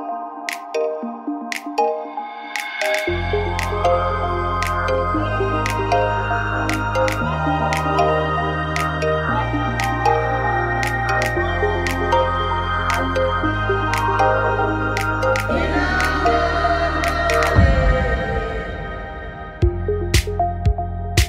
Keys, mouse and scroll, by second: 2.7-5.7 right drag, 5.7 w, 6.8 t, 10.6 click, 12.6-13.9 right drag, 13.6 w, 13.9 click, 15.2 click, 16.3-17.9 right drag, 17.9 KP_7, 19.3 middle click.